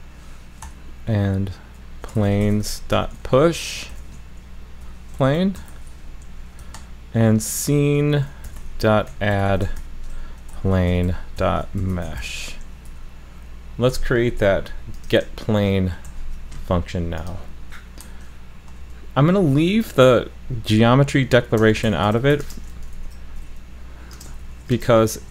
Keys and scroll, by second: 16.1 super+c, 22.9 super+v.